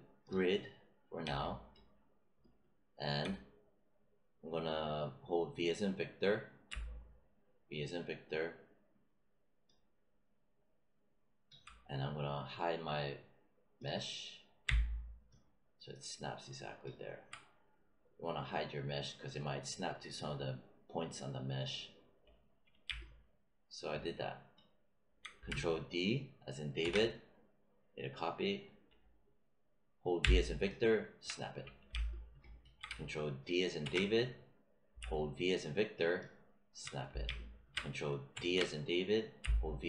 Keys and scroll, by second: 6.6 v, 14.6 v, 26.8 ctrl+d, 30.1 v, 33.8 ctrl+d, 35.0 v, 38.3 ctrl+d, 39.3 v.